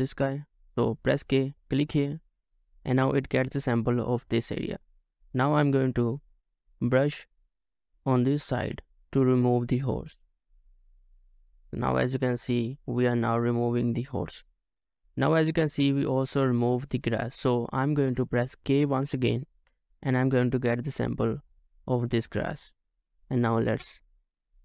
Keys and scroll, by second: 1.3 typing, 21.0-21.5 typing.